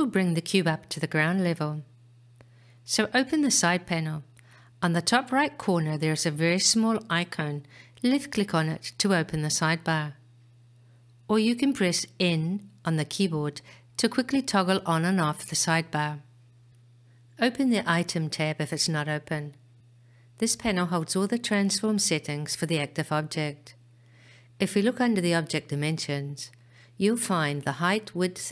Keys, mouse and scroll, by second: 8.1 click.